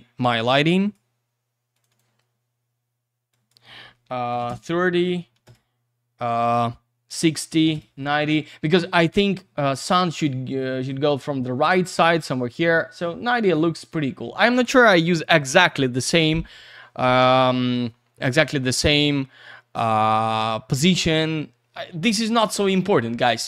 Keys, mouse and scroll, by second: 0.8 click, 1.7 click, 1.9 click, 3.3 click, 4.3 3, 4.4 Return, 5.3 6, 5.4 Return, 7.7 Return, 9.3 click.